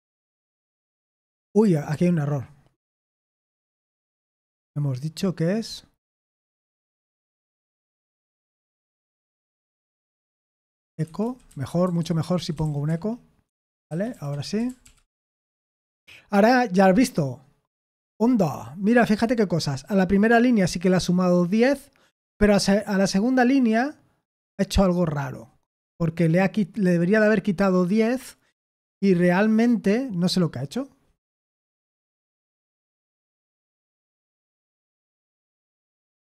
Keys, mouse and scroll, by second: 1.6 ctrl+p, 1.9 ctrl+p, 3.5 Return, 6.4-14.8 typing, 13.4 Escape, 14.8 ctrl+p, 15.0 Return, 33.6 ctrl+p, 34.1 ctrl+p, 34.9 Return.